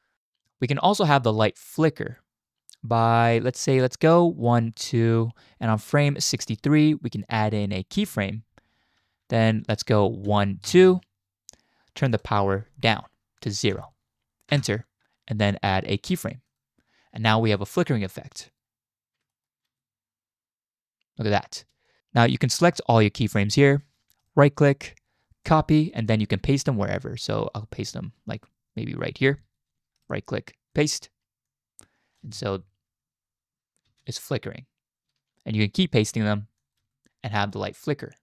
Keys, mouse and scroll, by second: 0.1-6.3 drag, 7.9 click, 10.3 Right, 10.7 Right, 12.2-14.5 drag, 16.5 click, 17.6-18.5 drag, 19.3 shift+click, 19.7 space, 21.6 space, 21.9 drag, 22.2 click, 22.6-23.4 drag, 24.2-25.5 drag, 26.1-29.0 drag, 30.1-30.8 drag, 31.5-32.2 drag, 32.2 space, 33.9 space, 36.0 ctrl+v, 36.6 click, 36.8 space.